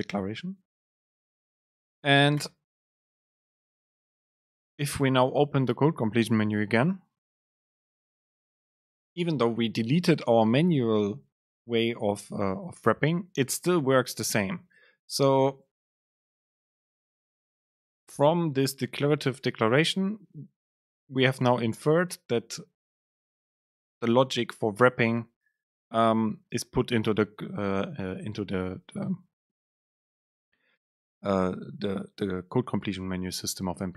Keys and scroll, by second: 2.5 Return, 4.3 super+space.